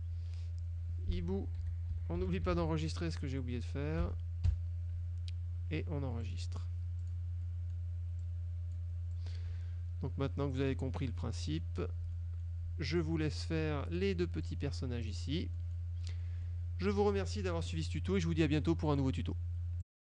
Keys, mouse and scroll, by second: 1.5-3.1 typing, 4.1 Caps_Lock, 4.6 KP_2, 6.3 click, 7.1 click, 7.5 click, 8.3-9.1 drag, 9.3-10.9 drag, 11.5 middle click, 12.3 middle click, 13.0 click, 14.0 click, 14.5 click, 15.1 click, 15.7 middle click, 16.5 middle click, 19.0 click, 19.9 click.